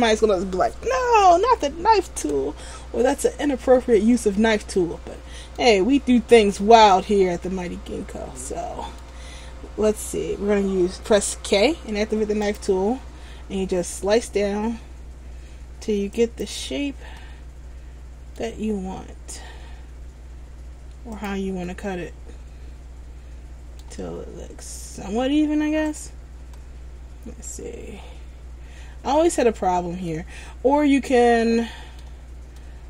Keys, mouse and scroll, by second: 2.4 a, 2.9-3.5 scroll up 1, 3.5 middle click, 6.1 scroll down 2, 6.7 middle click, 11.4 k, 17.4 middle click, 21.8 middle click, 26.7 middle click, 29.8 scroll down 2, 30.2 middle click.